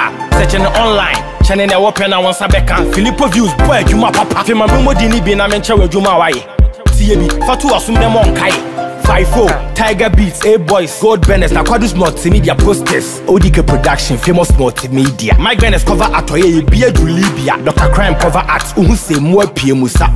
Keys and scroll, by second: 2.2 ctrl+-, 9.6 ctrl+z, 14.5 ctrl+=.